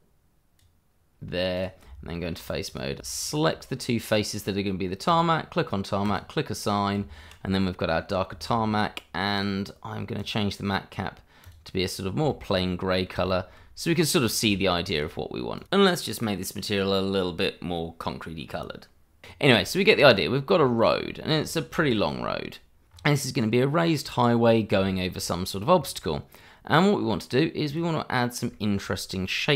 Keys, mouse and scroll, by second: 1.8 Tab, 2.7 click, 3.2 shift+click, 3.3 click, 6.9 Tab, 7.9 middle click, 9.3 click, 11.8-12.1 scroll down 1, 12.3 shift+middle click, 12.6 middle click, 13.8 click, 14.2 scroll up 1, 14.5 shift+middle click, 15.5 click, 17.8 click, 19.2-19.5 scroll down 1, 19.6 shift+middle click, 20.1-20.5 scroll down 1, 20.5 scroll up 1, 21.1 shift+middle click, 21.7 scroll down 1, 21.8 shift+middle click, 22.2-23.0 scroll up 1, 23.6 middle click, 24.4-24.8 scroll down 1, 24.8 shift+middle click, 25.5 scroll down 1, 25.8 middle click, 27.7 click, 28.5 shift+middle click, 29.1-29.5 scroll down 2.